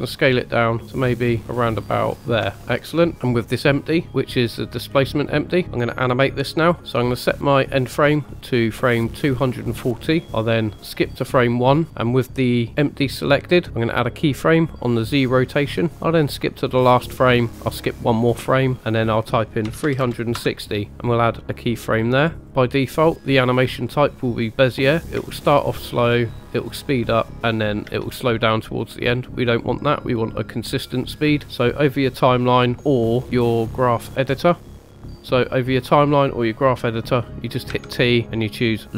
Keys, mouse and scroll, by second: 2.2 ctrl+click, 2.6 middle click, 3.1 click, 3.1 middle click, 4.1 g, 5.4 right click, 9.0-10.4 drag, 12.6 middle drag, 14.9 click, 16.4 click, 17.7 click, 18.8-20.3 drag, 22.4 click, 25.2 space, 27.8 space, 29.5 click, 30.3 click, 33.2 click, 34.5 click, 35.1 click, 35.2 click, 35.2 shift+middle click, 37.7 t.